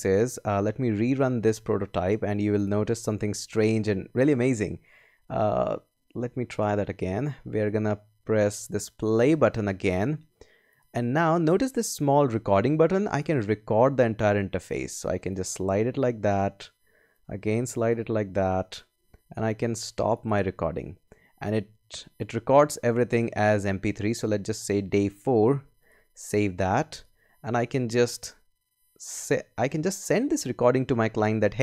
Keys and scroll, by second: 29.2 space.